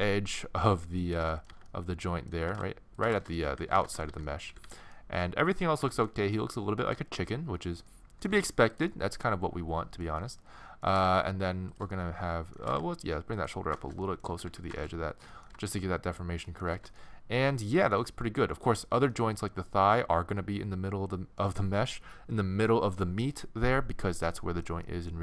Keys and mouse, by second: 1.5-4.7 typing, 5.3 middle click, 5.7 middle click, 8.4 g, 10.0 middle click, 10.9 g, 12.3 middle click, 12.7 g, 14.3 a, 14.5 a, 18.7-20.0 middle drag, 20.4 middle click, 24.4 middle click.